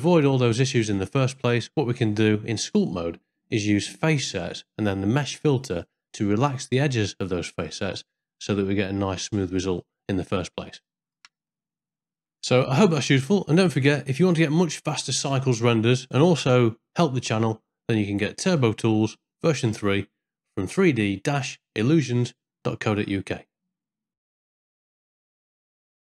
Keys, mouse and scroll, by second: 1.6 ctrl+middle click, 2.7-3.8 middle drag, 4.4 middle click, 7.1-8.8 middle drag, 10.1-11.3 middle drag, 11.5 shift+middle click, 12.4 middle click.